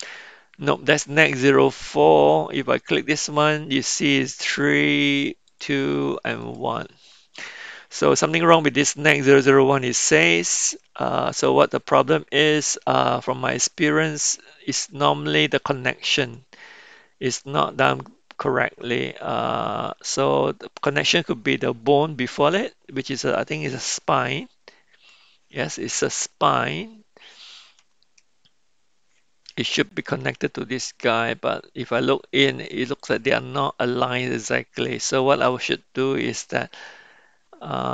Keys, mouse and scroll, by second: 5.5-5.9 drag, 6.4 click, 16.2 click, 23.1 click, 35.5 click.